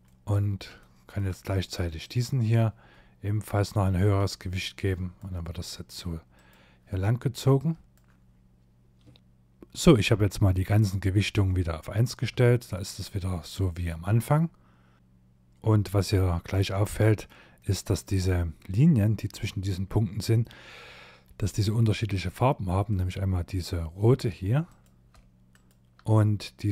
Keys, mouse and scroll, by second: 1.0 click, 3.0 click, 6.5 click, 8.5 BackSpace, 9.2 middle click, 10.5 middle click, 11.4 shift+middle click, 12.0 middle click, 12.6 middle click, 16.6 middle click, 21.9 click, 23.7 click, 24.6 shift+click, 25.9 click.